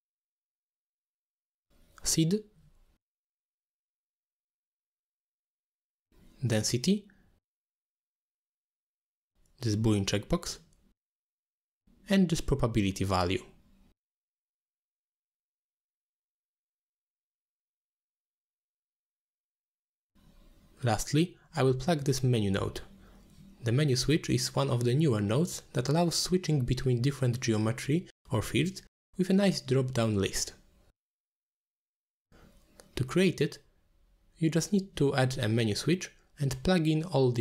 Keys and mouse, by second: 0.2 click, 2.0 click, 2.3 click, 2.5 g, 3.0 click, 3.2 g, 3.5 click, 4.9 click, 5.2 click, 5.4 ctrl+h, 5.9 drag, 6.5-6.9 drag, 7.0 click, 7.4 middle click, 8.1 shift+d, 8.7 middle click, 9.0 middle click, 9.3 g, 10.1 middle click, 10.2 g, 10.8 click, 11.9 click, 12.0-12.4 drag, 14.5 middle click, 14.8 middle click, 15.0 shift+d, 15.5 middle click, 16.1 middle click, 16.5 middle click, 17.1-18.1 drag, 18.5 middle click, 19.0 ctrl+h, 19.3 click, 19.3 x, 19.5 click, 20.0 middle click, 20.6 middle click, 21.2 click, 21.7 ctrl+h, 22.4 click, 22.9 ctrl+h, 23.4 click, 24.0 middle click, 25.7 middle click, 26.2 click, 27.8-30.9 drag, 31.7-32.2 drag, 32.8-33.4 drag, 34.2-34.6 drag, 35.0 click, 35.4 click, 35.8 x, 36.4 shift+a.